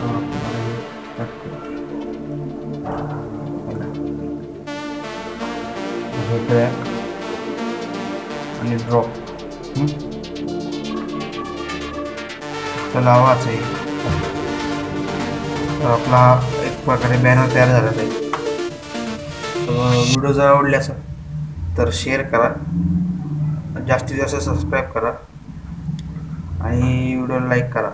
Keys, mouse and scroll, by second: 2.6-5.4 drag, 5.4 alt+scroll up 1, 6.0 alt+scroll up 1, 7.2-11.8 drag, 13.6 Left, 14.6 click.